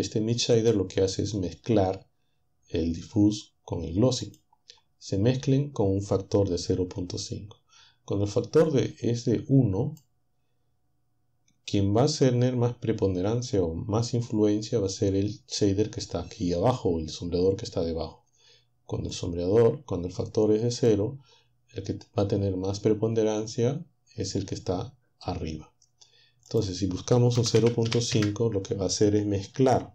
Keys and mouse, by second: 4.3 click, 8.4-10.2 drag, 19.1-21.0 drag, 26.5 click, 27.4-28.2 typing.